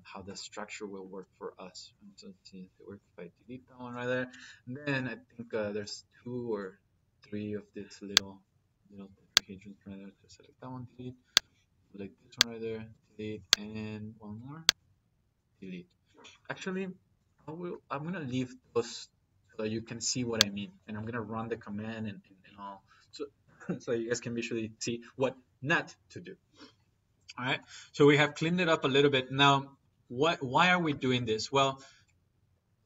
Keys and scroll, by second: 1.4 Delete, 10.0 Delete, 12.7 Delete, 15.1 Delete, 17.5 ctrl+z.